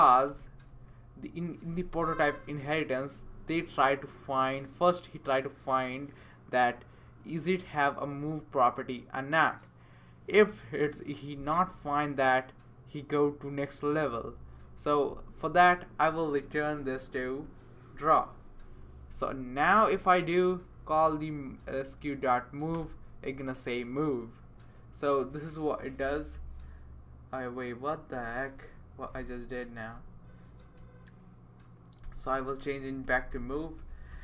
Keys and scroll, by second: 0.2 Return, 16.7 super+z, 17.1 super+z, 17.4 super+z, 20.5 Up, 21.8 Up, 22.7 Return, 26.3 super+v, 28.5 super+z, 32.0-34.2 typing.